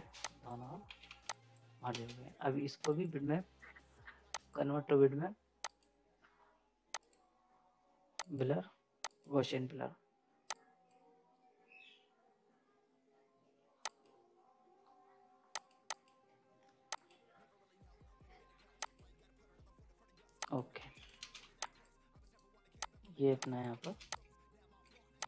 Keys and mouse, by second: 0.2 click, 0.8 ctrl+z, 1.2 click, 1.9 space, 2.9-13.8 drag, 20.8 z, 20.9 right click, 21.2 space, 21.4 z, 21.6 click, 22.2 right click, 22.2 right click, 22.8 click, 23.8 space, 24.1-25.2 drag.